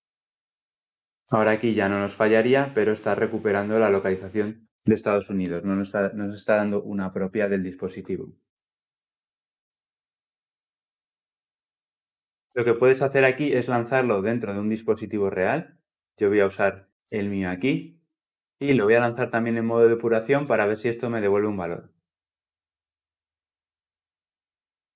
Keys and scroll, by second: 20.2 shift+F9.